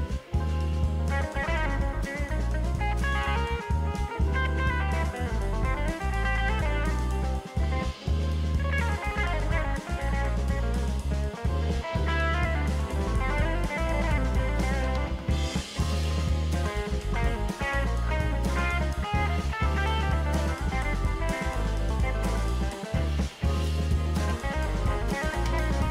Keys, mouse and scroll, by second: 1.9 alt+shift+click, 13.9-16.0 typing, 21.5 ctrl+t, 22.5 shift+click.